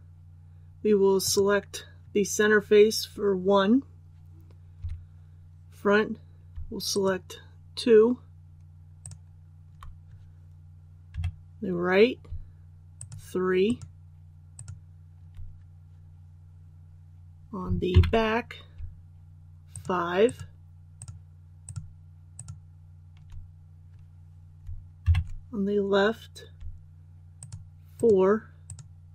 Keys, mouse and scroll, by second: 1.2 right click, 4.8 KP_1, 6.9 shift+right click, 9.0 shift+right click, 11.1 KP_3, 13.0 shift+right click, 13.6 shift+right click, 14.5 shift+right click, 17.9 KP_1, 19.7 shift+right click, 20.2 shift+right click, 20.9 shift+right click, 21.6 shift+right click, 22.3 shift+right click, 25.0 KP_3, 27.4 shift+right click, 27.9 shift+right click.